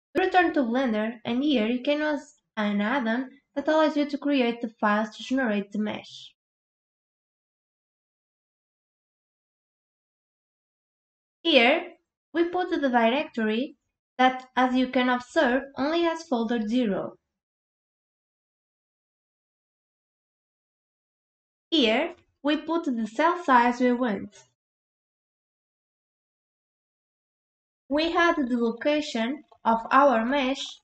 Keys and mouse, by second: 6.5 drag, 7.8 click, 10.2 drag, 13.8 click, 24.5-26.5 drag, 30.0 click.